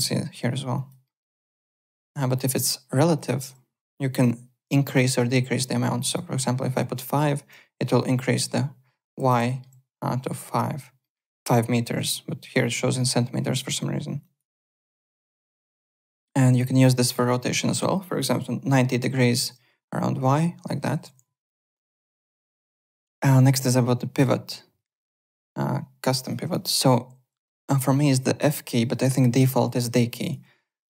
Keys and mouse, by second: 0.7 alt+click, 1.0 alt+middle click, 2.4 click, 3.1 click, 6.0 click, 6.7 KP_5, 7.3 KP_Enter, 7.3 Return, 9.4 middle click, 11.0 alt+middle click, 14.2 alt+click, 14.6 alt+right click, 14.8 alt+Tab, 15.7 alt+click, 15.9 e, 18.1 click, 18.7 KP_9, 19.3 Return, 20.9 ctrl+z, 21.5 alt+Tab, 22.0 alt+click, 26.2 click, 26.5 alt+click, 29.6 alt+Tab, 30.2 alt+click.